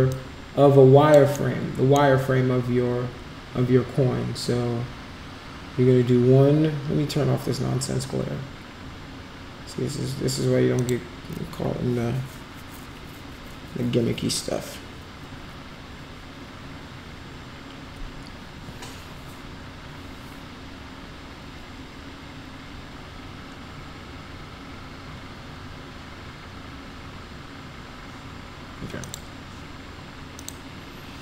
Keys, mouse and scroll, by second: 0.1-1.1 alt+drag, 1.4 alt+middle click, 10.8 click, 29.0 click, 30.4 click.